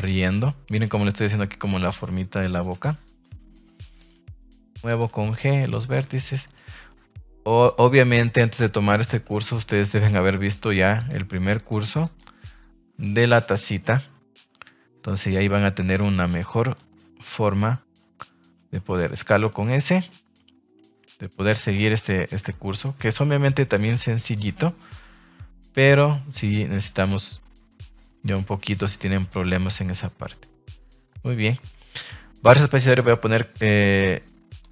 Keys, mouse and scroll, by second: 0.1 g, 1.1 click, 2.7 g, 3.9 right click, 4.1 g, 4.5 click, 4.8 right click, 5.0 g, 5.8 right click, 6.0 g, 6.4 click, 8.4 click, 9.5 right click, 10.0 shift+right click, 10.6 shift+right click, 10.9 shift+right click, 11.5 shift+right click, 12.0 shift+right click, 12.5 middle click, 13.3 shift+middle click, 16.1 click, 16.6 middle click, 17.4 middle click, 20.6 click, 20.9 middle click, 21.8 shift+middle click, 22.0 middle click, 24.3 shift+middle click, 24.5 middle click, 26.3 click, 26.8 z, 27.4 middle drag, 27.4 scroll up 1, 27.6 scroll down 1, 27.7 scroll up 1, 27.9-29.2 scroll down 2, 28.0 middle click, 29.2 click, 29.5 Tab, 29.9-31.0 middle drag, 32.4 space.